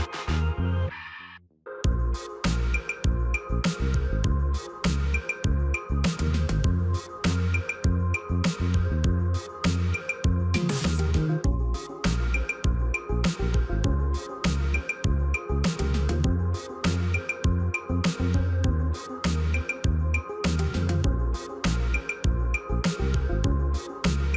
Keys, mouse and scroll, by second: 3.4 ctrl+d, 12.2 shift+click, 13.4 ctrl+g, 15.3-15.7 scroll down 3, 15.7 scroll up 1, 15.8-19.8 scroll down 1.